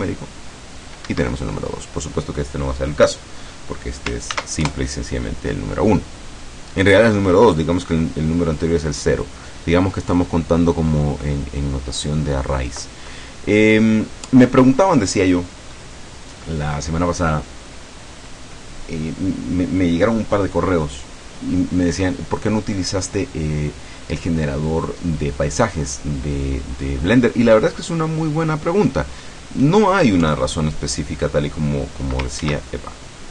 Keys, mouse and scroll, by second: 0.0 KP_Add, 1.2 Escape, 4.4 ctrl+s, 4.7 ctrl+KP_Enter, 6.5-7.0 scroll down 1, 7.0 scroll up 1, 7.4 scroll down 1, 8.4 scroll down 1, 11.7-12.1 scroll up 1, 12.1-12.4 scroll down 1, 14.2-14.6 scroll down 1, 14.9-15.8 scroll down 1, 15.8 scroll up 1, 16.4 scroll up 2, 17.0 scroll down 2, 30.2 KP_2, 32.4 ctrl+z.